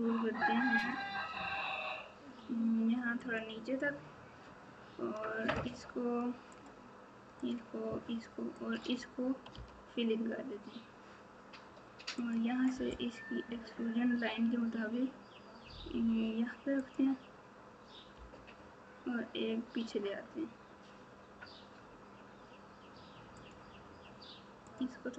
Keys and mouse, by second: 8.5 shift+click, 9.5 f, 12.1 click, 13.5 e, 18.1 e, 24.7 click.